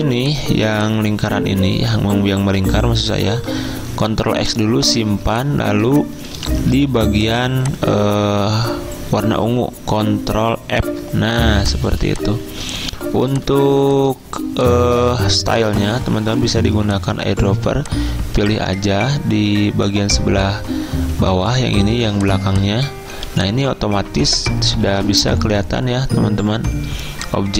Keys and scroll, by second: 4.0 ctrl+x, 5.2 z, 6.8 v, 10.9 ctrl+f, 12.0 z, 23.2 z, 24.4 v.